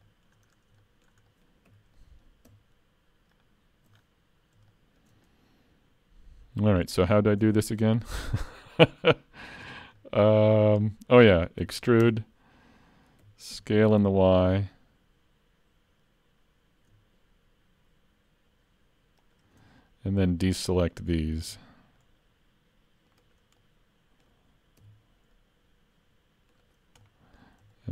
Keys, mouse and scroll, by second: 0.1 shift+middle click, 0.5 scroll up 3, 0.8 shift+middle click, 1.3 middle click, 1.7 3, 2.0 middle click, 3.4 alt+click, 4.0-4.5 scroll down 4, 4.7 shift+middle click, 5.3 middle click, 7.1 shift+middle click, 7.6 scroll up 3, 8.1 shift+middle click, 8.4 middle click, 9.7 scroll down 1, 10.0 shift+middle click, 11.6 e, 13.2 s, 19.8 middle click, 20.9 shift+middle click, 21.5 c, 23.6 middle click, 24.2 scroll up 1, 24.8 c, 27.0 middle click, 27.7 shift+middle click.